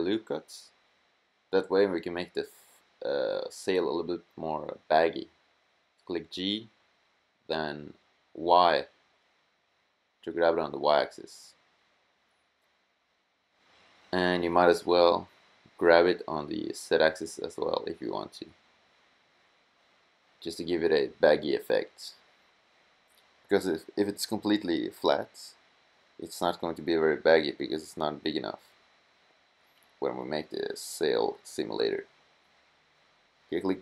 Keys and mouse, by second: 2.9 click, 3.7-5.1 middle drag, 5.6 g, 9.3 click, 9.5 g, 16.7 g, 24.6 middle click, 25.3-26.7 middle drag, 27.8 middle click, 29.5 middle click, 29.7 middle click, 31.7 middle click, 32.2 middle click, 33.5 a.